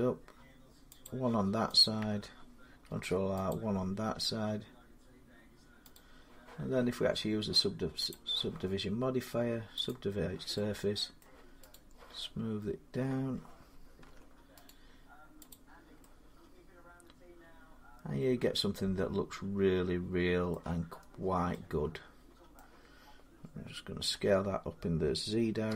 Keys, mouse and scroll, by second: 0.9 click, 2.0 click, 2.7 ctrl+r, 3.3 click, 5.8 click, 7.9 click, 9.7 click, 11.0 middle click, 11.5 right click, 13.9 Tab, 14.5 right click, 15.3 click, 20.3 middle click, 20.8-21.3 scroll, 22.4 middle click, 23.9 s, 25.5 z.